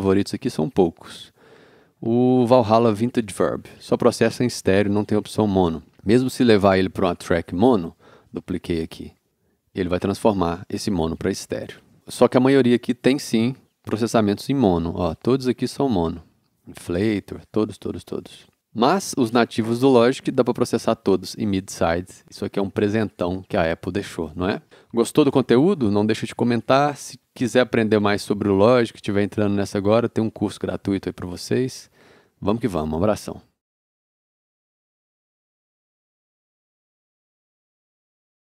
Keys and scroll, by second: 7.9 alt+super+a.